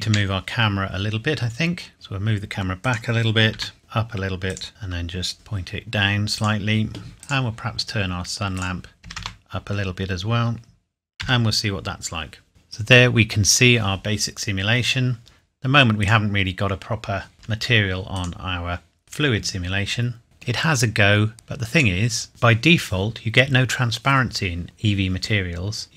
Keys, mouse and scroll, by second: 0.0 Escape, 0.6-1.6 scroll down 1, 2.7 middle click, 2.8 click, 3.5 g, 4.5 click, 4.7 r, 5.3 g, 6.4 click, 7.2 click, 9.0 KP_3, 9.2 KP_Enter, 11.2 F12, 12.5-13.0 scroll up 1, 16.0 click, 17.4 Escape, 18.1 click, 20.2 middle click, 20.5 scroll down 1, 21.3 click, 22.3 scroll down 1.